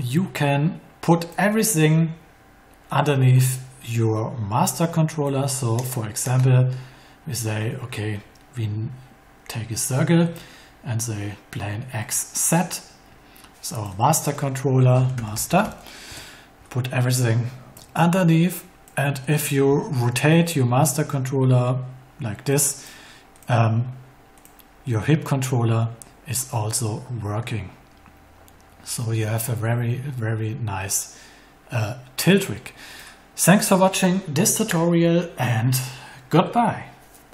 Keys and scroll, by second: 14.5-16.0 typing.